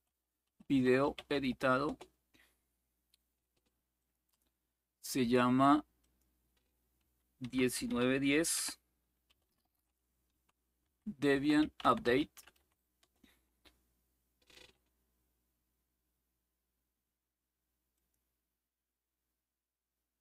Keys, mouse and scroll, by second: 0.0-1.6 typing, 3.7 click, 5.7-6.7 drag, 5.7-13.0 typing, 17.7 click.